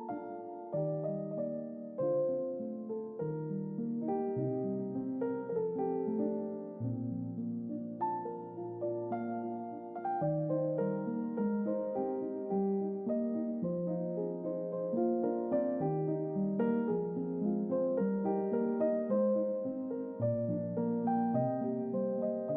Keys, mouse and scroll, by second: 2.3 click, 3.1 click, 3.8-4.5 scroll down 2, 4.6 scroll down 2, 4.7 scroll up 2, 5.8 click, 7.1 click, 8.1-8.4 middle drag, 8.9-9.2 ctrl+middle drag, 9.6-10.5 middle drag, 10.8-11.7 shift+middle drag, 12.2-12.8 ctrl+middle drag, 14.6 middle click, 15.3 shift+middle click, 15.9 Tab, 16.5 middle click, 17.6 click, 18.5 middle click, 19.5 middle click, 20.1 shift+middle click, 21.2 alt+click, 21.8-22.5 alt+middle drag.